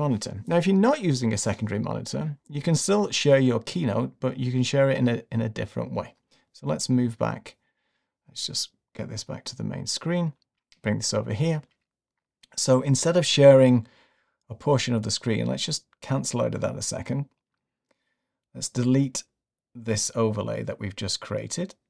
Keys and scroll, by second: 8.5 Left.